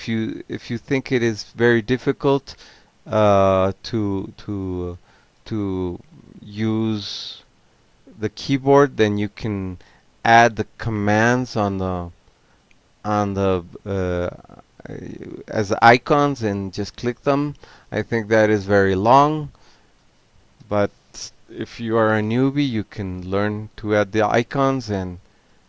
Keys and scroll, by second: 2.0 ctrl+g, 3.2 e, 4.6 -, 4.9 f, 5.2 space, 8.7-13.9 typing, 13.9 Return, 21.4 q, 24.2 ctrl+c, 24.5 ctrl+a, 25.2-25.6 typing.